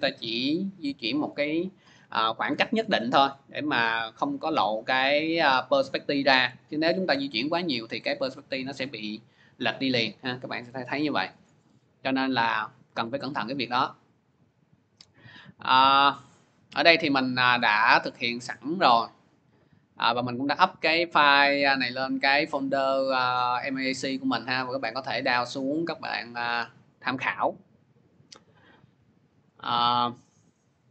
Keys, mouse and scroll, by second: 6.3 p, 14.0 click, 15.6 click, 16.6 click, 17.9 click, 21.7 click, 23.6 click, 23.7 click, 24.7 click, 24.8 click, 26.2 click, 26.4 click, 27.0 click, 27.1 click, 28.4 click, 29.3 click.